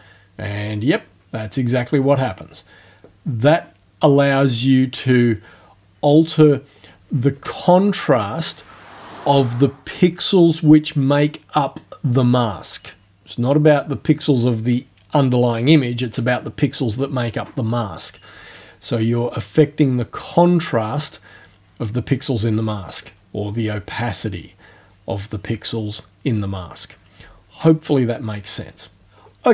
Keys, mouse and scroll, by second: 19.2-23.2 drag, 23.6-26.6 drag, 29.2 click.